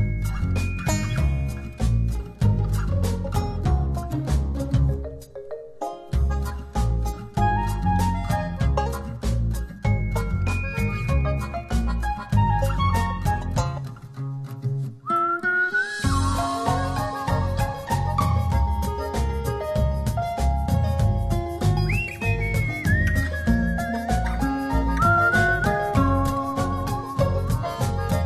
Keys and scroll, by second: 6.8 s, 17.6 0, 17.9 Return.